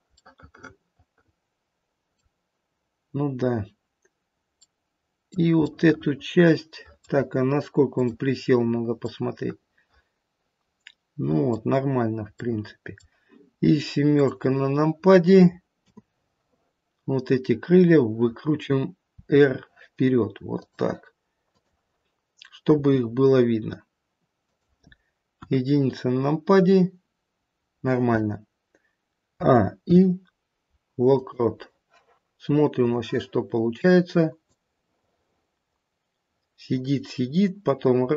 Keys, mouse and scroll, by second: 0.1 middle click, 0.1-0.8 scroll down 1, 0.8 middle click, 1.9 middle click, 3.2-3.6 scroll down 1, 4.6 middle click, 5.7 middle click, 8.0 click, 8.6-9.0 scroll up 1, 9.0 middle click, 9.9 middle click, 10.9 middle click, 11.8-12.4 scroll down 1, 12.4 middle click, 14.1 click, 15.7 KP_7, 17.6 click, 19.1 r, 21.4 click, 22.8 r, 25.5 KP_1, 29.3 a, 29.8 i, 32.8 click, 34.4 click.